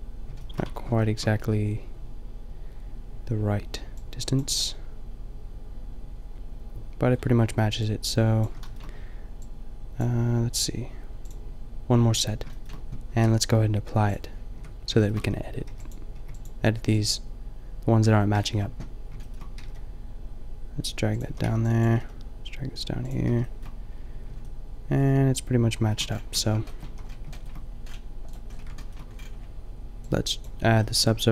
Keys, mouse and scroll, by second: 0.6 Tab, 5.6 middle click, 14.6 Tab, 15.2 a, 15.7 b, 16.2 b, 17.1 b, 19.6 g, 21.2 a, 21.4 b, 21.8 g, 23.1 a, 26.4 Tab, 26.9 a, 28.5-29.0 middle drag, 30.8-31.3 middle drag.